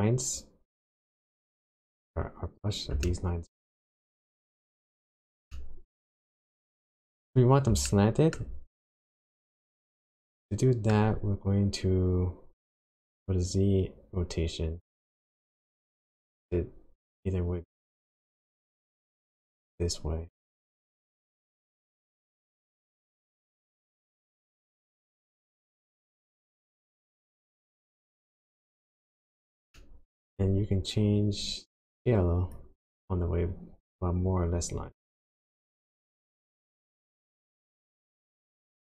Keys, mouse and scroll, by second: 2.1 scroll up 2, 2.6-2.9 scroll down 1, 3.1 shift+middle click, 5.5 shift+middle click, 8.4 shift+middle click, 8.8-9.8 scroll up 4, 9.8 scroll down 1, 10.2 shift+middle click, 11.4 scroll down 1, 13.1 click, 29.7 middle click, 30.6-31.0 scroll up 3, 31.5-31.9 scroll up 4, 32.5 click, 38.7 click.